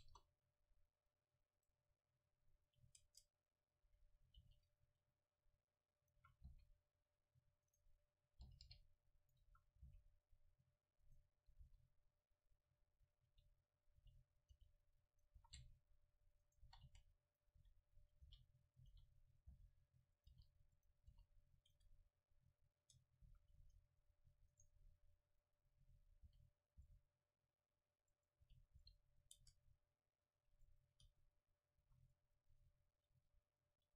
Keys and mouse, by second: 0.0 KP_0, 1.6 right click, 3.1 Tab, 3.9 a, 4.4 ctrl+r, 6.1-7.9 drag, 6.2 a, 6.5 c, 8.5 g, 9.5 a, 9.9 c, 11.1-12.8 drag, 11.6 KP_1, 12.8 middle click, 13.3 e, 14.0 g, 14.6-17.2 drag, 14.6 r, 15.4 s, 16.6 right click, 16.7-21.1 typing, 18.4-19.4 drag, 20.3 click, 21.8 Tab, 22.7 click, 22.8 Tab, 23.3 a, 23.6 c, 24.8-26.6 middle drag, 26.3 r, 26.8 g, 28.3-31.1 drag, 28.4 r, 28.8 g, 29.4 Tab, 31.1 Tab, 31.9 a, 32.9 ctrl+r.